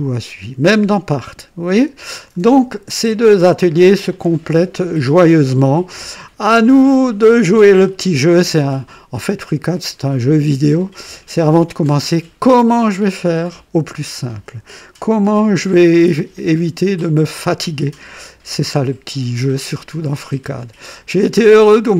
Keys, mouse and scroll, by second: 6.5-9.4 drag, 10.9 scroll up 1, 11.5-12.2 right drag, 15.5-20.0 drag, 21.4 click.